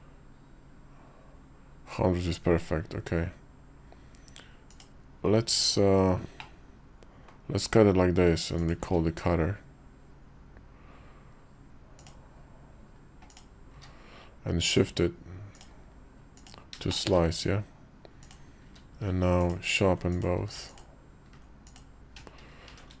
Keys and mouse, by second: 6.1 middle click, 7.4 KP_5, 8.3 click, 8.6 q, 13.5 q, 16.6 shift+click, 18.0 click, 18.4 q, 19.9 click, 20.0 q, 21.4 click, 22.5 shift+1.